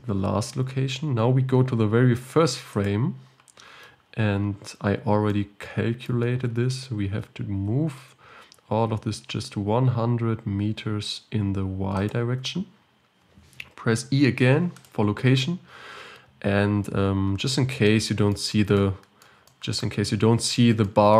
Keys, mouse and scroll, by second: 2.9-4.0 drag, 4.0-5.3 scroll down 3, 5.3 scroll down 2, 5.3-7.6 shift+middle drag, 7.6 g, 14.9 i.